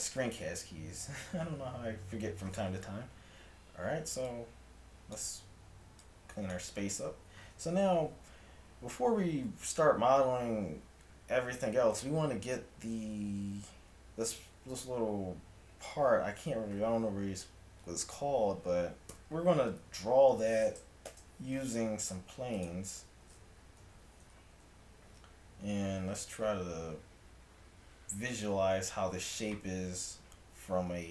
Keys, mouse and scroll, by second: 1.3 n, 19.2 KP_7, 20.1-21.1 middle drag, 21.1 shift+a, 23.8 Tab, 24.6 a, 30.3-31.1 middle drag.